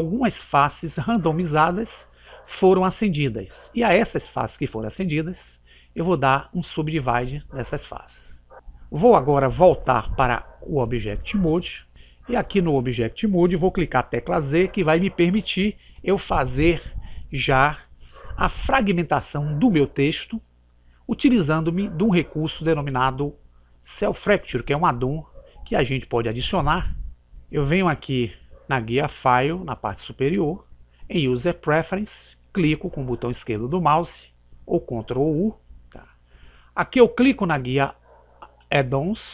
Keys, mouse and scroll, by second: 7.6 click, 11.6 click, 14.7 z, 19.2-29.7 middle drag, 29.7 click.